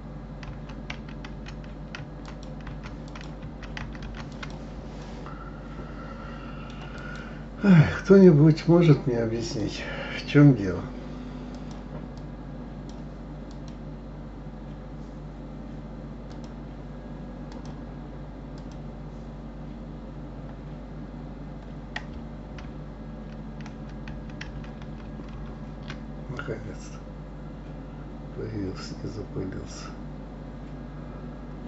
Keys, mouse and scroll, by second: 2.9 ctrl+r, 3.2 ctrl+r, 5.0-7.0 middle drag, 7.0 click, 8.2 click, 9.4 click, 11.5-13.7 drag, 16.3 click, 17.5-20.5 drag, 22.6 ctrl+r.